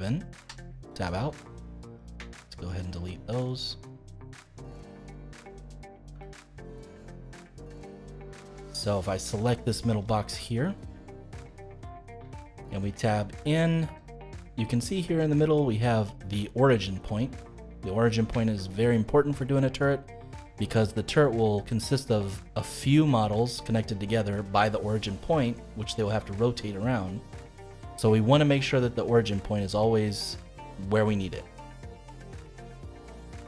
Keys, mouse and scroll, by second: 0.4 Tab, 1.1 middle click, 1.9 click, 2.7 shift+click, 3.5 shift+click, 6.1 x, 7.6 middle click, 8.5 click, 8.8-10.0 middle drag, 10.0-10.4 scroll up 2, 10.4-12.0 shift+middle drag, 12.0 scroll up 2, 12.3-13.8 shift+middle drag, 13.8 Tab, 14.2-17.2 middle drag, 18.0-18.4 scroll down 1, 18.4-21.1 shift+middle drag, 21.1 scroll down 2, 21.4-26.3 middle drag, 27.1-33.4 middle drag.